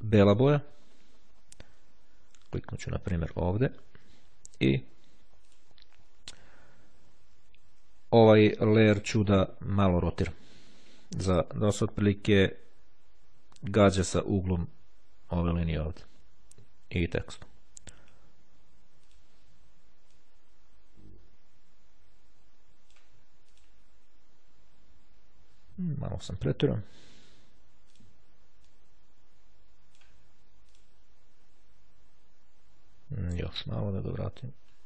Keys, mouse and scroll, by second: 3.7 click, 5.5 click, 19.2 click, 20.2-23.6 drag, 23.8 click, 28.1 click, 28.8 click, 30.9 click, 33.5 click, 34.3 click.